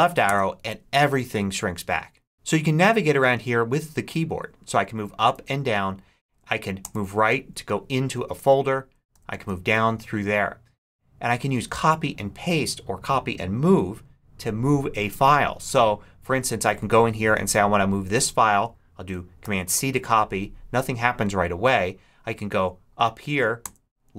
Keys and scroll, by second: 0.1 Left, 4.6 Up, 5.2 Down, 6.2 Up, 6.7 Right, 9.0 Down, 19.3 super+c, 22.1 Up, 23.6 Left.